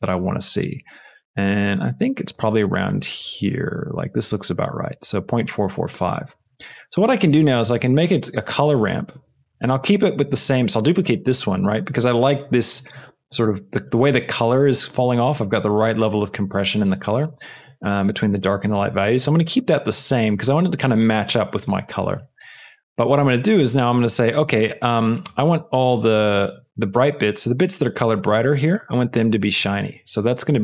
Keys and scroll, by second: 7.6 shift+d.